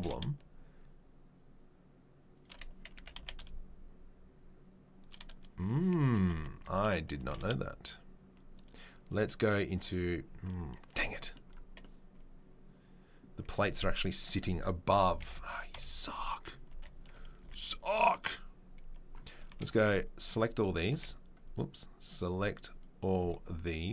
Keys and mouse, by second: 2.9 s, 6.3 Tab, 6.6 a, 7.2 g, 9.6 click, 9.7-18.1 middle drag, 14.9-17.4 typing, 18.1 click, 18.2-23.9 middle drag, 19.5 b, 20.9 v, 22.1 click, 22.7 click, 23.2 b.